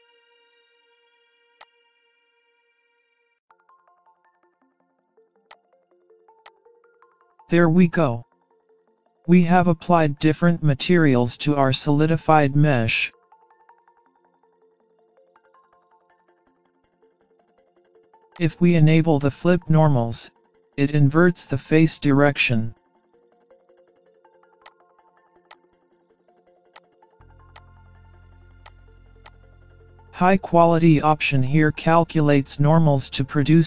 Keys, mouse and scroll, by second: 1.6 click, 5.5 click, 6.5 click, 7.7-8.1 scroll down 2, 8.1-8.6 scroll up 1, 8.6 middle click, 14.3-15.1 scroll up 1, 16.7-17.1 scroll down 1, 18.4 click, 19.2 click, 22.3 click, 24.7 click, 25.5 click, 26.8 click, 27.6 click, 28.7 click, 29.3 click, 31.1 click, 32.3 click.